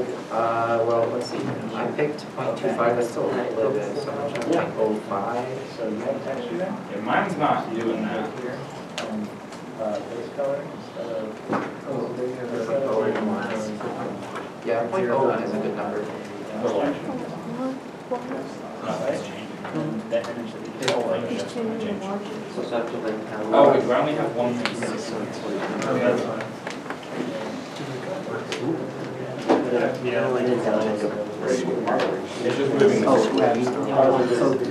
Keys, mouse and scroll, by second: 0.2 scroll up 1, 3.6-4.2 scroll up 1, 5.4 Return, 6.5 scroll down 1, 7.1-7.5 scroll up 2, 7.8 shift+middle click, 8.1-8.4 scroll up 1, 8.7 scroll down 1, 10.5 scroll up 1, 13.0 BackSpace, 13.3 BackSpace, 13.3 1, 14.0 Return, 15.3 scroll down 1, 16.3 shift+middle click, 16.6 scroll up 1, 18.3-18.6 scroll down 1, 19.8 shift+middle click, 22.4 a.